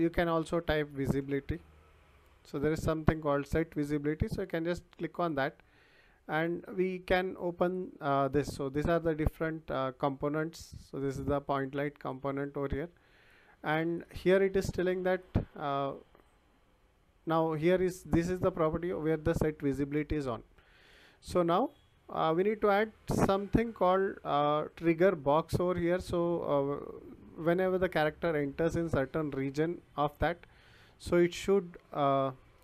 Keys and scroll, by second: 1.2 v, 1.6 i.